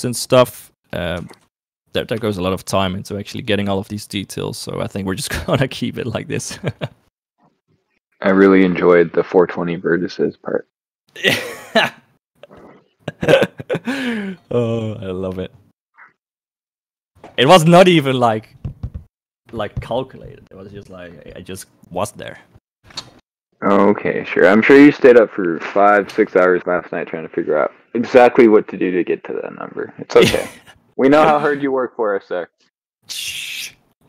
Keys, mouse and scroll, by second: 0.8 right click, 1.4 ctrl+s, 2.2 Escape, 5.0 shift+middle click, 5.9 shift+click, 6.7 shift+click.